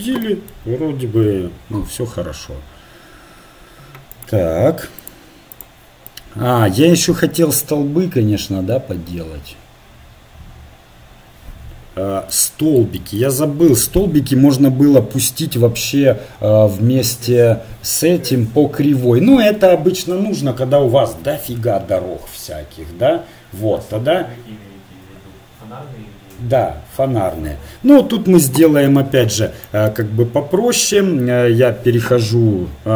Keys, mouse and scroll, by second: 4.1-5.6 right drag, 5.0 click, 6.1 click, 7.0-8.0 middle drag, 12.3-13.6 middle drag, 28.5 KP_1.